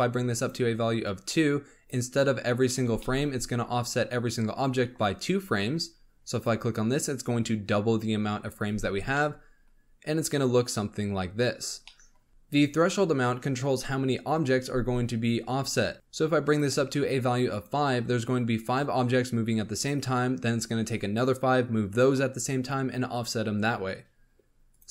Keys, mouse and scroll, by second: 0.0 click, 0.7-1.0 scroll down 3, 1.0 click, 2.8 b, 3.3-6.3 scroll up 4, 6.3-8.7 drag, 8.7 space, 9.1-11.6 middle drag, 11.6 scroll down 2, 11.8-12.3 middle drag, 12.3 click, 16.4-17.6 drag, 24.7 click.